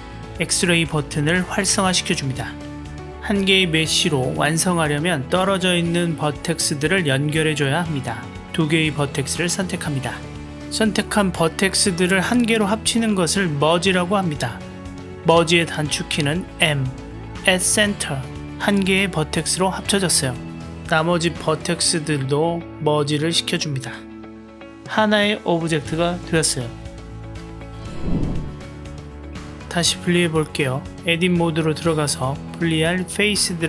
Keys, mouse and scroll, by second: 3.8 click, 3.9-7.3 middle drag, 8.1-8.6 drag, 16.7 m, 20.5-20.8 drag, 21.0 m, 21.8-22.1 drag, 22.5 m, 23.1 click, 23.6-24.2 middle drag, 24.4 m, 25.2-26.3 middle drag, 27.0 Tab, 27.4 click, 27.8 click, 30.2 Tab, 33.1-33.5 drag.